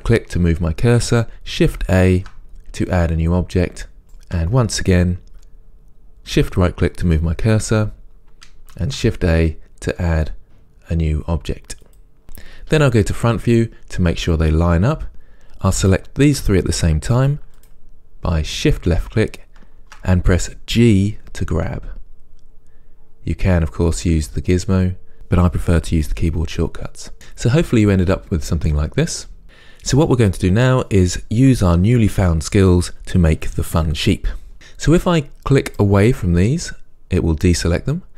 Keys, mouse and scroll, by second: 2.1 shift+a, 4.0 shift+right click, 8.8 shift+a, 13.3 KP_1, 17.7 shift+click, 18.7 shift+click, 20.9 g, 23.9 click, 24.9 click, 27.1-29.4 middle drag, 27.1 scroll down 1, 34.5 ctrl+z, 35.9 click.